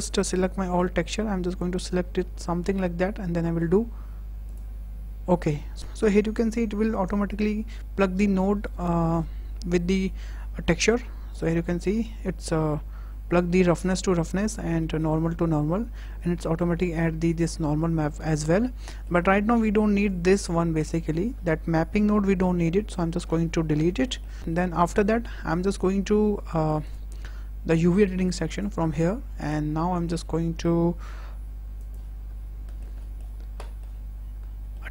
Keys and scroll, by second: 22.4 Delete, 31.0 z.